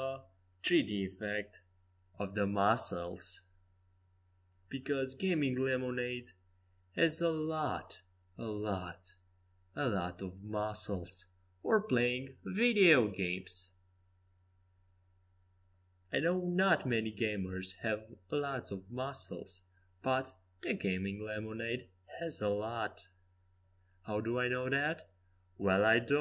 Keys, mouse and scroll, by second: 2.2-4.8 middle drag, 4.9 a, 5.5 c, 7.3-9.2 drag, 9.4 r, 13.9-15.0 middle drag, 16.3 KP_5, 16.6 KP_1, 17.1 KP_3, 17.5 KP_5, 20.9 c, 23.9 a, 24.1 a, 24.6 a, 24.9 c.